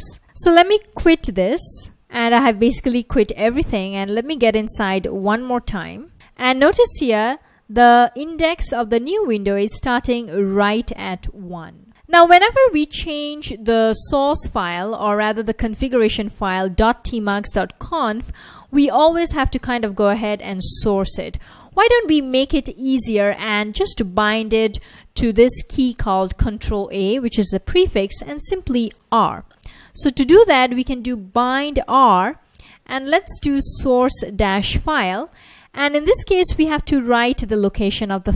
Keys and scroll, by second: 1.0 ctrl+c, 2.0 Return, 2.0 typing, 3.7-5.1 typing, 5.7 Return, 7.9 F1, 9.8 F1, 10.5 typing, 14.4 super+Tab, 16.8 F1, 23.0 Return, 23.3 Return, 29.8-36.4 typing, 37.9-38.3 typing.